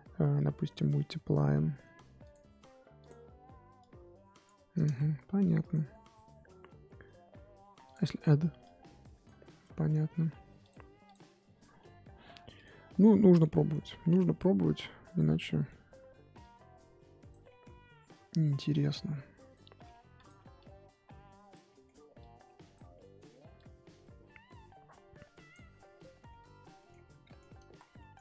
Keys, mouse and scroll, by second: 1.3-2.8 scroll up 5, 3.0-4.8 drag, 4.8 ctrl+z, 6.9-10.0 drag, 10.0 ctrl+z, 11.1-12.3 drag, 12.3 f, 13.4 middle click, 13.9 scroll down 1, 14.2-14.6 scroll up 1, 14.6 click, 15.4-16.4 middle drag, 16.4-17.4 drag, 17.4 middle click, 17.6-18.0 scroll up 1, 18.1-19.8 drag, 19.8 f, 20.5-21.6 drag, 21.6 middle click, 22.2 click, 22.9 middle click, 23.5-25.7 drag, 25.7-26.0 scroll down 6, 26.0 middle click, 26.5-27.2 scroll up 4, 26.8 middle click, 27.2 middle click, 27.6 ctrl+z, 27.9-28.2 middle drag.